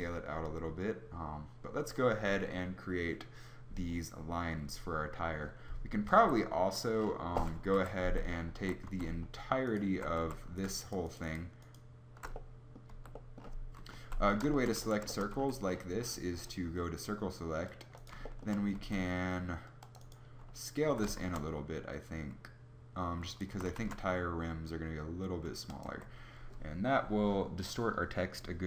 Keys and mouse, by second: 6.8 Escape, 7.7 KP_7, 8.1 Tab, 8.6 a, 8.9 z, 10.2 a, 12.8 z, 13.7 KP_7, 13.8 z, 14.7 a, 18.8 c, 19.7 c, 20.8 s, 23.5 s, 26.0 Tab.